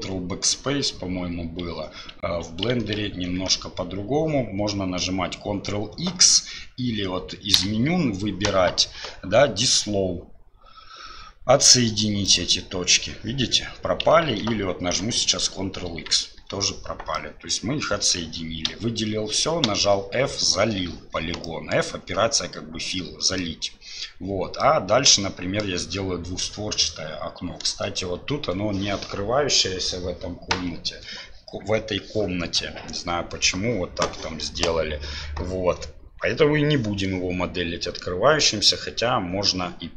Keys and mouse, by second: 2.9 ctrl+z, 14.2 ctrl+z, 15.8 ctrl+x, 17.1 click, 18.6 a, 21.4 click, 23.3 click, 24.6-25.6 drag.